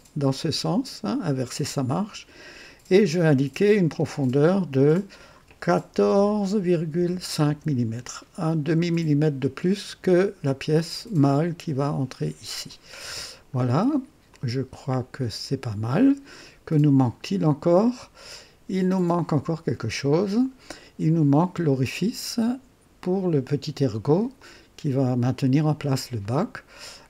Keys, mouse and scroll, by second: 3.9-5.3 drag, 5.9-7.5 typing, 7.3 KP_Enter, 11.3 click, 13.0 scroll up 2, 13.7-14.0 scroll down 2, 14.2-16.4 drag, 17.8 click, 18.9 click, 20.5 scroll down 2, 21.3-24.2 drag, 24.3-26.1 drag, 26.2 right click.